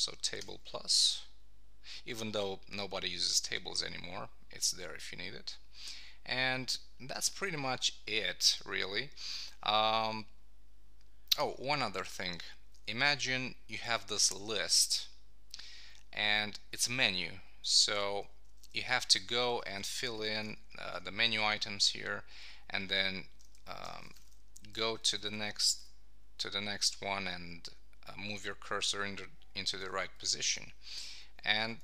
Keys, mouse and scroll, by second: 0.4 shift+=, 16.9 Down, 18.2 Up, 22.9 Down, 23.4 Up, 24.7 Down, 25.0 Left, 26.3 Right, 29.7 Up, 30.0 shift+Right.